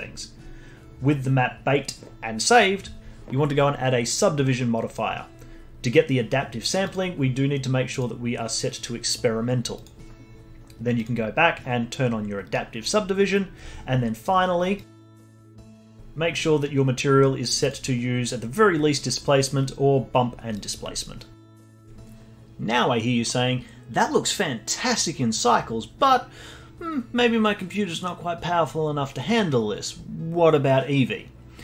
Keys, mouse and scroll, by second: 6.9 click, 7.9-9.8 drag, 11.0 click, 14.8 click, 15.3-17.6 scroll down 22, 17.6-20.6 drag.